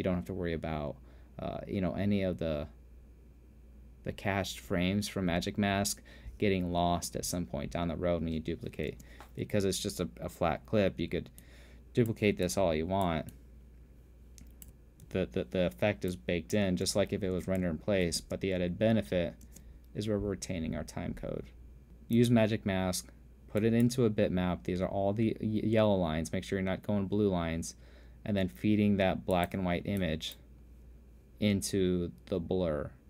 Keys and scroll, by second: 9.5 space, 15.7 alt+z, 16.4 z, 17.3 space, 18.2 alt+space, 19.7 space.